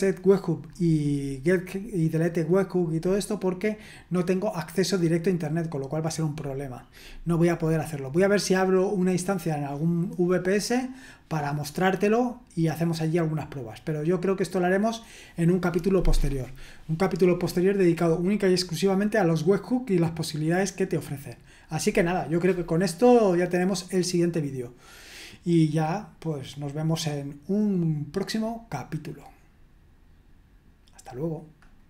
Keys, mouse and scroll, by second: 2.9-6.4 scroll down 1, 6.4-8.3 scroll down 1, 8.3-31.8 scroll down 1, 31.8 click.